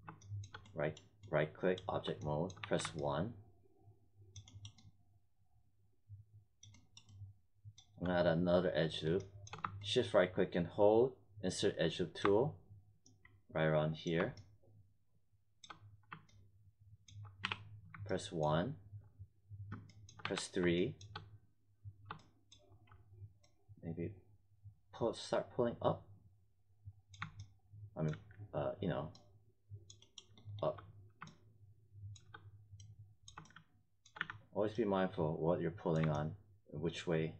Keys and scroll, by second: 2.5 1, 17.4 w, 20.2 3, 34.1 z.